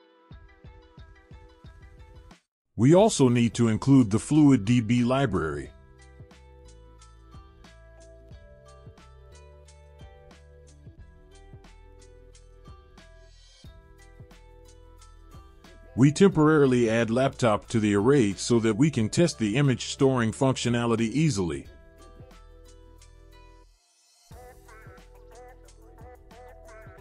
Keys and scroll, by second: 0.0-0.5 typing, 1.2 Return, 13.9 Return, 14.1 ctrl+v, 15.3 ctrl+s, 18.8 Left, 19.3 ,, 19.7 space, 21.1-23.7 typing, 26.9-27.0 typing.